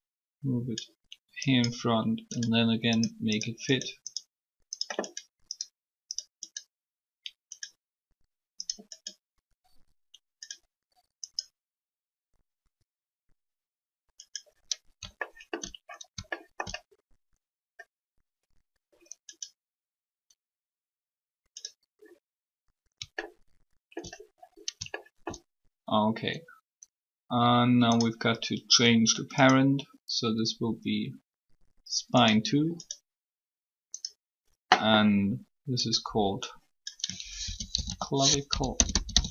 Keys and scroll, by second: 37.1-39.3 typing.